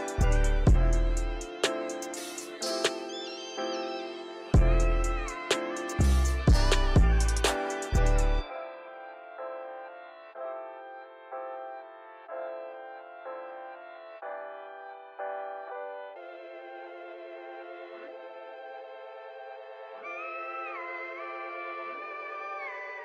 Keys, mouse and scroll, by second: 0.2-0.9 drag, 3.8 click, 5.1-6.9 drag, 7.6-9.4 drag, 9.4-9.8 scroll down 2, 9.8-10.8 shift+middle drag, 10.8 click, 13.5-14.3 drag, 16.4 click, 18.1 click, 20.1-22.7 drag.